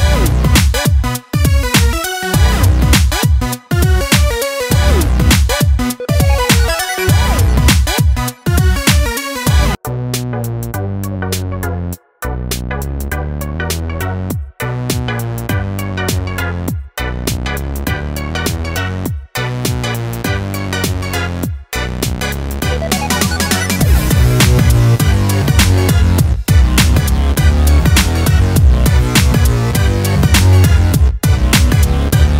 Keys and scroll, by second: 19.3 Caps_Lock, 19.6 typing, 20.9 BackSpace, 28.0 BackSpace, 28.1 Caps_Lock, 30.0-30.9 typing, 31.5 Return.